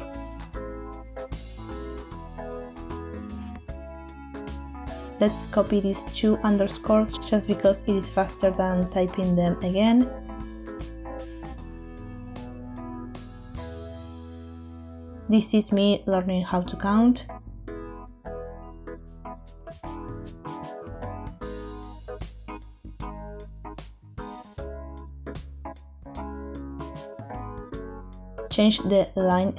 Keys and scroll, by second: 0.4 Return, 1.3 shift+-, 4.0 BackSpace, 4.6 BackSpace, 5.6 shift+Up, 6.2 Left, 6.8 Home, 8.4 c, 8.7 Right, 9.6 Left, 9.8 Left, 9.9 Left, 11.4 ctrl+v, 12.2 Return, 19.0 Up, 19.1 Up, 19.2 Up, 20.1 v, 20.6 Return.